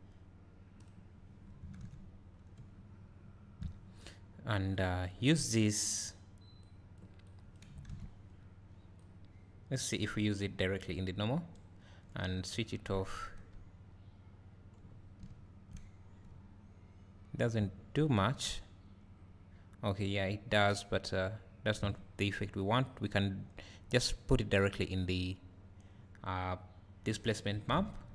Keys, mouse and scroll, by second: 0.8 click, 2.3 scroll down 1, 2.6 `, 4.8-7.3 drag, 9.0-20.8 drag, 14.4-14.7 scroll up 2, 15.3 `, 15.9 scroll down 1, 16.5 `, 24.9 click.